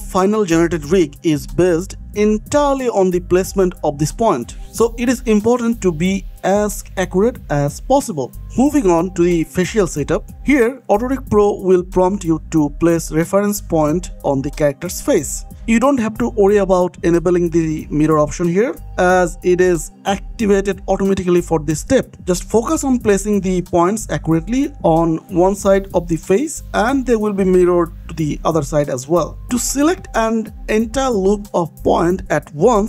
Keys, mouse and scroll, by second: 0.6 click, 0.8 scroll down 1, 1.0 shift+middle click, 2.7 click, 3.1 scroll up 1, 3.7 click, 5.3 scroll down 1, 5.7 scroll up 1, 6.2 scroll down 1, 6.5-7.1 scroll up 1, 8.4-9.2 scroll down 1, 10.5 click, 11.8 shift+middle click, 12.1 scroll up 1, 12.3 scroll down 1, 13.3 alt+click, 14.0 g, 15.3 click, 15.4 s, 16.0 click, 16.2 s, 16.9 click, 17.7 s, 17.9 x, 18.4 click, 18.7 s, 18.8 z, 19.7 click, 19.9-20.2 scroll up 1, 20.2 click, 20.7 g, 21.2 click, 22.2 click, 22.4 g, 22.8 click, 23.2 g, 23.5 click, 24.1 g, 24.5 click, 24.7 middle click, 25.3 KP_1, 25.9 shift+middle click, 26.8-31.7 typing, 27.0 click, 27.7 click, 28.3 click, 29.2 click, 29.9 click, 30.5 click, 31.1 click, 31.9 click.